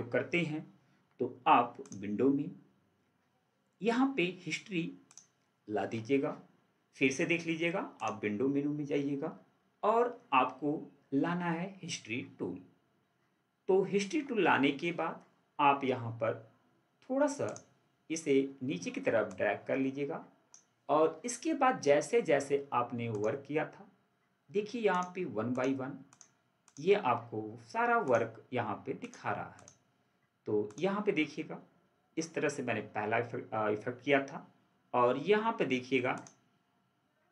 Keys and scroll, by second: 13.9 ctrl+4.